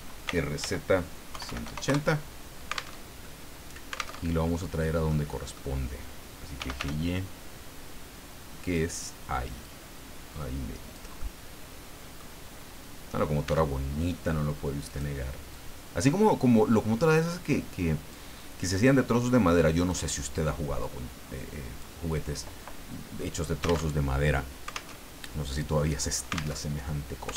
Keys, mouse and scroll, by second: 0.2-1.6 typing, 1.8 KP_Enter, 2.9 alt+Tab, 4.2 alt+Tab, 4.6 alt+middle click, 5.3 middle click, 6.3-7.3 typing, 8.6 click, 9.6-11.1 drag, 11.2-12.3 middle drag, 12.4-13.0 scroll up 4, 13.4 s, 14.9 click, 15.5 click, 17.1 click, 18.7-20.1 drag, 20.8-22.0 drag, 23.9 alt+Tab, 24.9 alt+Tab, 26.5 alt+Tab.